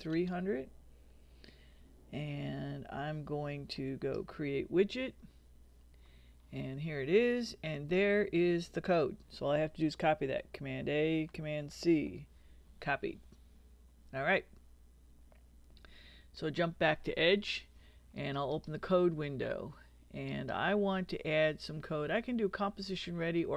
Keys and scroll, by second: 0.0-0.4 typing, 11.0 super+a, 11.7 super+c.